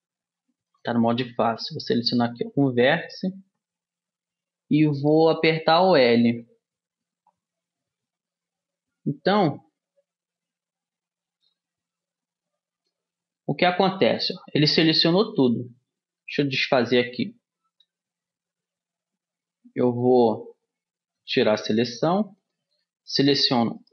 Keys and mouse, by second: 1.1 click, 2.4-4.1 drag, 2.4 right click, 3.5 l, 9.2-12.6 middle drag, 12.6 l, 16.8 ctrl+z, 20.8 middle click, 21.7 a.